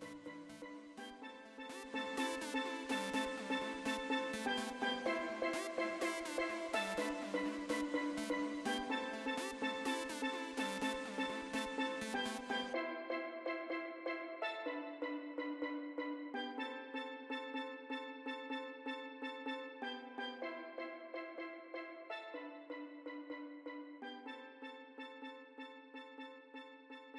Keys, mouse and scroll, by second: 0.4 click, 2.1 click, 3.0 click, 3.6 alt+right click, 3.9-4.3 scroll up 5, 4.3 alt+right click, 4.9 shift+a, 5.6-6.2 scroll down 13, 6.4 click, 7.3 shift+a, 12.4-13.0 scroll up 4, 13.0 click, 13.5 click, 14.4 shift+a, 17.0 shift+a, 20.5 click, 21.3 click, 21.9 click, 23.2 click, 24.5 click, 27.0-27.1 scroll down 3.